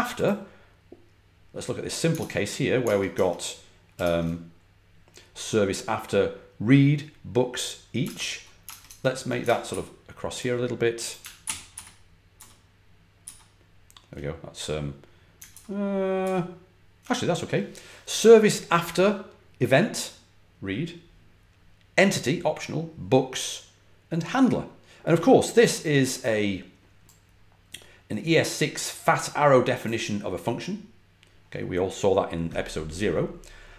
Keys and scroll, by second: 2.1 super+Tab, 2.7 super+Tab, 3.0 super+Tab, 3.9 shift+super+Tab, 7.9 super+Tab, 8.6 super+Tab, 8.8 super+Tab, 9.6 alt+super+Right, 11.3 alt+super+Right, 11.6 alt+super+Right, 15.4 alt+super+Right, 16.1 alt+super+Right.